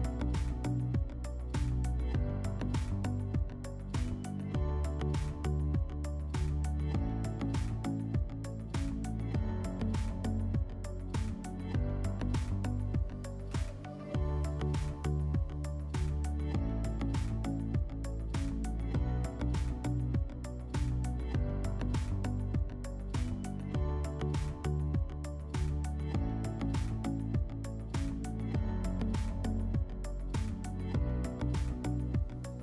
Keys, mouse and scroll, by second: 2.0 click, 5.5 click, 7.4 ctrl+click, 8.8 click, 9.7 5, 10.3 click, 10.5 click, 10.6 5, 11.9 click, 13.8 click, 18.9 click, 21.4 alt+middle click, 22.2 click, 23.4 middle click, 24.4 click, 25.4 click, 27.1 click, 28.1 click, 28.7 click, 29.7 click, 30.5 click, 30.7 click, 31.5 typing.